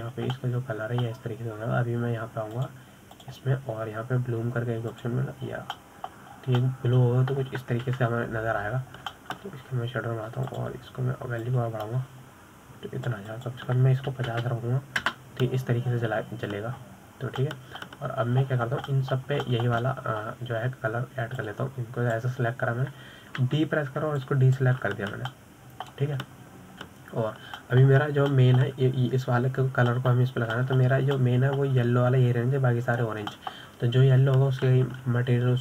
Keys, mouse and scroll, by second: 0.3-1.4 middle drag, 1.4-1.8 scroll up 3, 1.8-2.3 shift+middle drag, 2.3-2.7 scroll up 3, 2.7-4.9 middle drag, 4.9 click, 5.5 click, 7.4 click, 8.1-8.7 middle drag, 8.7 scroll down 4, 9.0-10.2 middle drag, 10.2 KP_7, 11.2 scroll down 3, 11.5-12.8 shift+middle drag, 12.8 click, 13.8-18.8 drag, 19.2-19.8 scroll up 1, 19.8-20.8 middle drag, 20.8-21.3 scroll down 8, 21.3-23.8 middle drag, 23.8 click, 25.8 b, 27.7-28.5 middle drag, 28.5-29.3 scroll up 3, 30.0-30.4 middle drag, 30.4-30.7 scroll up 3, 30.7 shift+middle click, 31.3-32.3 scroll up 2, 32.3-35.4 middle drag, 35.4-35.6 scroll down 5.